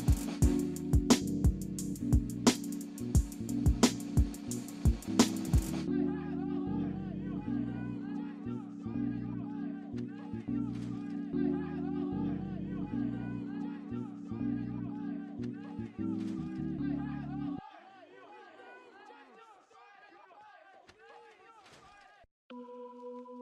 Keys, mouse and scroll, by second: 1.3 scroll up 1, 1.7 alt+middle click, 2.3 alt+scroll up 1, 3.3 scroll down 1, 3.9 scroll up 1, 5.8 middle click, 12.0 scroll down 1, 12.6 alt+middle click, 13.6 scroll up 1, 19.4-19.8 scroll down 1, 19.9 alt+middle click, 20.2 alt+scroll up 2, 20.7 right click, 22.1 scroll up 1, 22.5 alt+middle click.